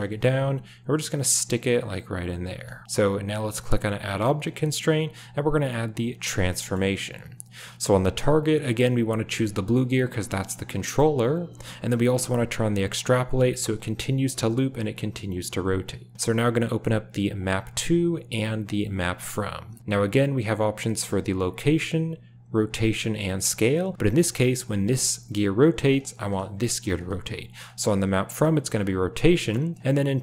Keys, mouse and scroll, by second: 0.1 drag, 0.3 g, 2.7 g, 4.0-6.3 drag, 6.6 shift+middle click, 13.1 click, 18.9 click, 24.1 drag, 24.5 r, 26.2 drag, 26.5 r, 29.2 click, 29.7 drag, 29.8 r.